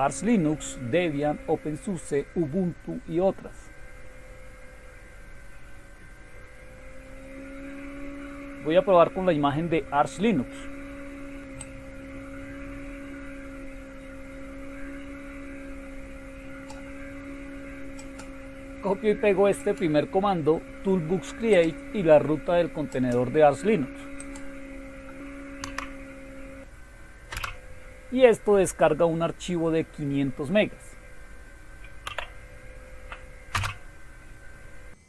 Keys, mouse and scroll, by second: 5.3-7.3 scroll down 2, 7.8-9.8 scroll down 2, 11.6-16.7 drag, 19.6 click, 21.5 click, 24.2 click, 25.6 Right, 27.3 Return, 32.1 y, 33.6 Return.